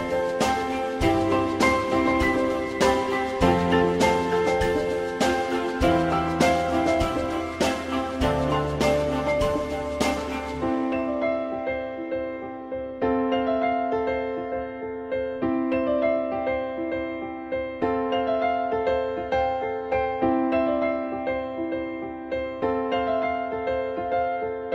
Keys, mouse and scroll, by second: 3.1 ctrl+z, 4.0 ctrl+z, 5.0 alt+middle click, 14.4 click, 20.1 alt+middle click.